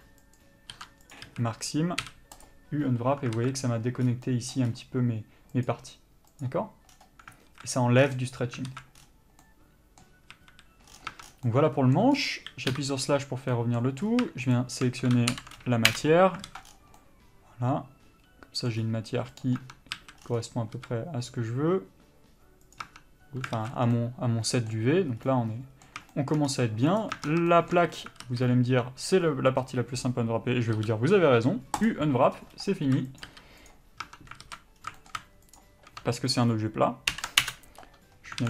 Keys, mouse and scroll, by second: 0.5 ctrl+click, 1.3 ctrl+e, 1.4 a, 2.6 u, 3.6 alt+a, 5.8 click, 7.5 alt+scroll down 1, 7.6 alt+a, 10.5 a, 11.1-11.4 scroll down 2, 11.3 Tab, 11.6 middle click, 12.3-12.9 scroll up 1, 12.9 KP_Divide, 13.7 middle click, 14.2 scroll up 1, 14.7 shift+click, 16.1 ctrl+l, 16.6 alt+a, 16.8 scroll down 1, 17.2 middle click, 18.9 scroll up 1, 19.6 click, 19.8 Tab, 20.1 a, 20.9 s, 22.9 click, 23.1 Tab, 23.7 alt+a, 24.0 scroll down 1, 24.2 middle click, 25.4 scroll up 1, 25.4 middle click, 26.6 scroll up 1, 27.2 click, 27.3 Tab, 27.4 scroll down 1, 27.5 Tab, 27.7 shift+middle click, 28.4 alt+z, 28.9-30.9 scroll up 1, 32.0 u, 33.1 s, 33.4 click, 33.5 r, 33.9 click, 34.2 Tab, 34.6 alt+z, 34.9 scroll down 1, 35.2 shift+middle click, 35.7 shift+click, 37.6 ctrl+l.